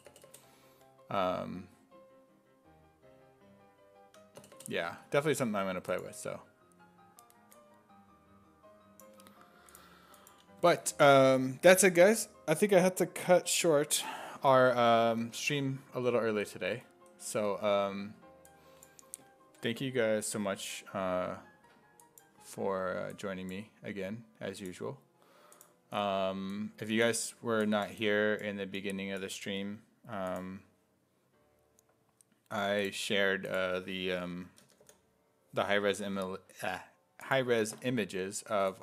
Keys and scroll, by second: 0.3 BackSpace, 4.4 BackSpace, 34.5 a, 34.8 t.